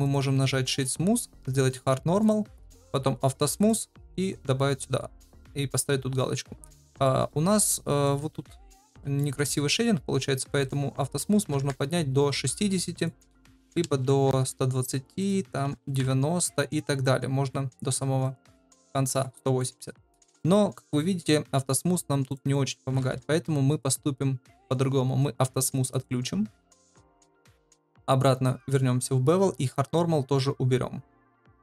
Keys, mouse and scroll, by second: 0.0 click, 0.8 click, 2.2 click, 3.5 click, 7.0 middle click, 7.6-8.0 shift+middle drag, 8.7 middle click, 9.1 shift+middle drag, 10.7-12.4 drag, 13.0-14.7 drag, 15.2-16.5 drag, 17.0 click, 18.2 click, 19.5 middle click, 20.5 middle drag, 22.2-23.6 drag, 25.9 click, 27.2 click, 29.8 click, 31.2 click.